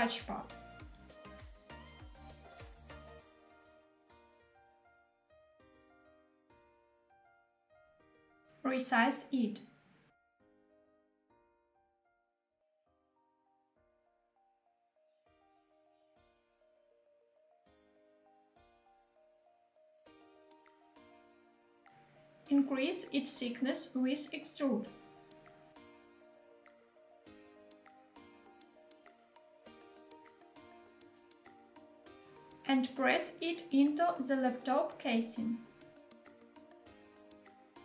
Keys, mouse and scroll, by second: 0.4 click, 0.8-2.3 middle drag, 2.5-2.8 shift+middle drag, 3.5 shift+middle click, 3.5 scroll up 1, 3.5 g, 3.8 z, 7.6 click, 7.8 shift+middle click, 8.3 s, 10.1 click, 10.5-11.3 middle drag, 11.8 g, 12.2 y, 12.9 click, 13.2-14.1 middle drag, 14.1 s, 14.6 x, 17.0 click, 18.1 g, 18.8 z, 20.7 click, 21.1-21.8 middle drag, 22.2 Tab, 23.5 click, 24.3-25.3 middle drag, 27.7 e, 30.3 click, 30.6 middle click, 30.8 Tab, 31.3-32.2 middle drag, 32.3 g, 33.3 z, 37.1 click, 37.4-37.8 middle drag.